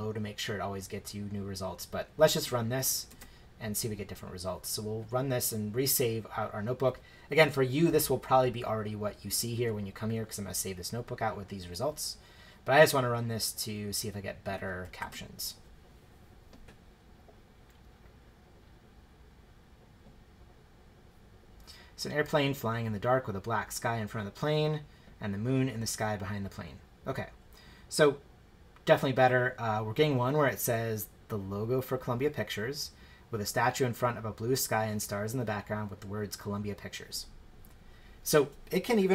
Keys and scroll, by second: 3.1 shift+Return, 15.0 shift+Return.